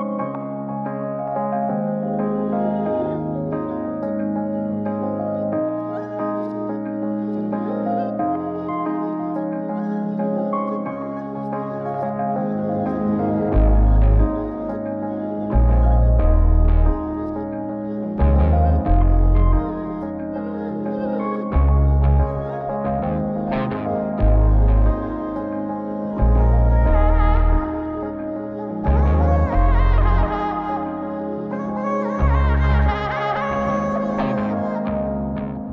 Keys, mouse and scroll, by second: 0.4-1.3 drag, 2.0-3.8 drag, 6.9-8.1 drag, 8.5-8.8 scroll up 1, 8.8-10.1 scroll down 2, 10.1 click, 11.8 scroll down 1, 12.6 n, 13.7-14.9 drag, 15.7 g, 17.8-18.8 drag, 19.1 s, 21.7 g, 24.2 s, 24.9 middle click, 25.5 click, 26.5 m, 27.8 shift+a, 33.8 click, 35.5 click.